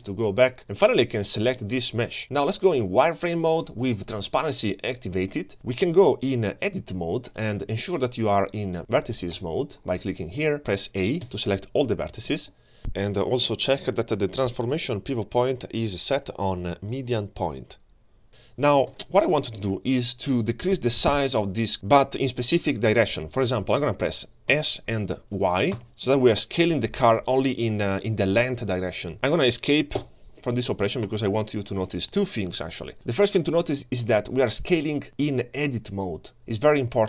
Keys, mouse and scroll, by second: 0.6 click, 2.2-3.1 scroll down 1, 3.1 click, 3.9 click, 4.5 click, 5.7-7.4 drag, 9.3 click, 11.3 a, 18.9 ctrl+space, 24.5 s.